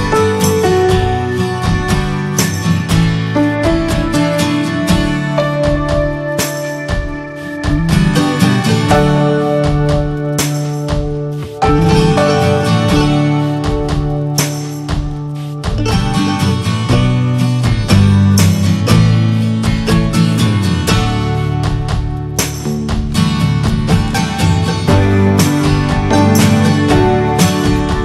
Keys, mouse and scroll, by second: 0.7 scroll down 4, 0.9 middle click, 1.3 ctrl+z, 1.5-2.3 scroll up 4, 2.3-6.0 shift+middle drag, 6.0-7.6 drag, 7.6 scroll down 3, 7.8 middle click, 8.4 scroll up 3, 8.8-10.5 shift+middle drag, 10.5-12.1 drag, 13.1-15.8 drag, 15.8 ctrl+z, 16.7-18.5 drag, 18.5-19.2 scroll down 4, 18.8 middle click, 19.2 shift+middle click, 19.7 scroll up 3, 20.2 shift+middle click, 20.4 shift+scroll up 1, 21.4-24.3 drag, 24.3 scroll up 2, 25.2-28.0 drag.